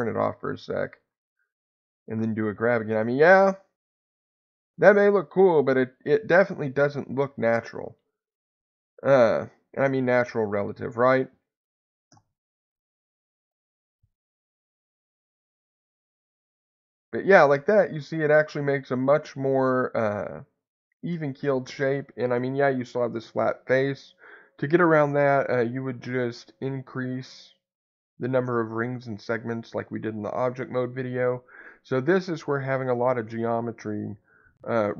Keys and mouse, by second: 0.9 click, 2.2 g, 4.1 click, 4.5-6.5 middle drag, 7.2 ctrl+z, 8.7 click, 12.1 g, 12.6 x, 14.5 Escape, 15.7 g, 16.0 x, 17.1 click, 17.5-19.0 middle drag, 20.5 middle click, 22.3 middle click, 25.1 ctrl+z, 27.0 middle click.